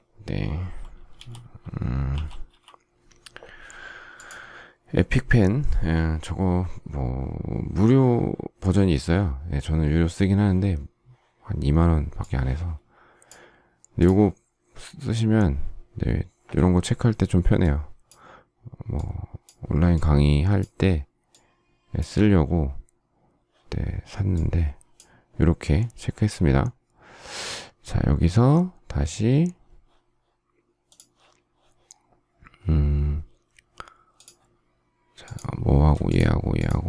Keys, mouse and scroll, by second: 0.9-2.4 typing, 35.8 shift+click.